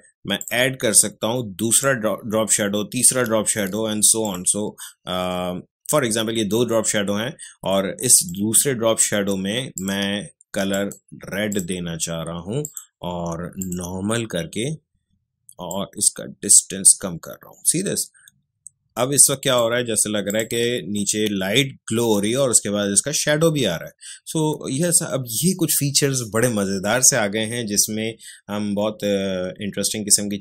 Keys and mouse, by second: 4.2 click, 8.1-20.2 drag.